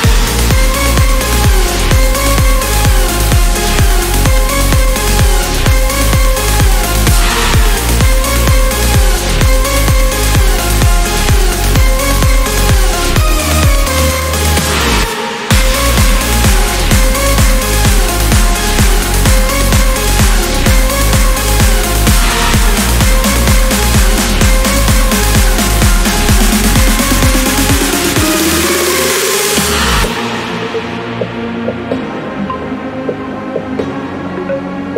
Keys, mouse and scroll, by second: 1.4 click, 2.6 1, 3.4 click, 4.2 1, 5.6-7.6 drag, 8.8 click, 10.0 click, 10.4 right click, 11.2 click, 12.6 click, 14.4 5, 14.8 0, 15.8-16.8 scroll down 2, 16.8-18.0 drag, 18.6-20.0 drag, 20.4 click, 21.2 click, 21.6 right click, 22.4 click, 23.6 click, 25.3 click, 26.4 click, 26.9 0, 28.0 click, 28.6-29.0 scroll down 1, 29.4-29.8 scroll up 1, 30.2 click, 31.0 click, 32.0 right click, 33.6 click.